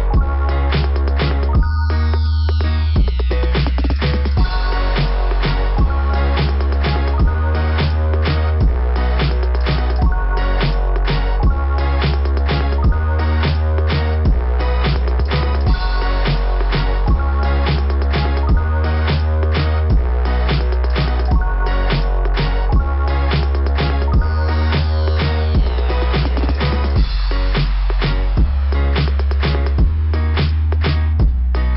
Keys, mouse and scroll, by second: 25.1 click, 25.2 click, 26.4 click, 26.5 click, 29.0 click, 29.4 click, 30.1 click, 30.5 click.